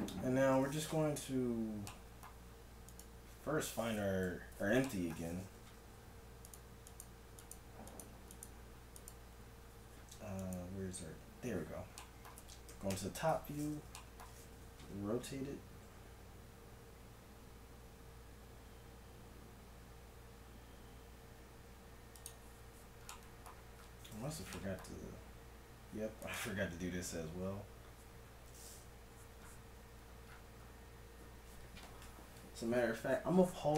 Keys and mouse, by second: 2.8-4.8 drag, 4.3 KP_1, 5.6 z, 6.4-7.5 drag, 7.5 right click, 12.0 middle click, 12.8 KP_1, 12.9 KP_7, 13.3 z, 14.8 r, 23.2-26.2 middle drag, 26.2-28.1 drag.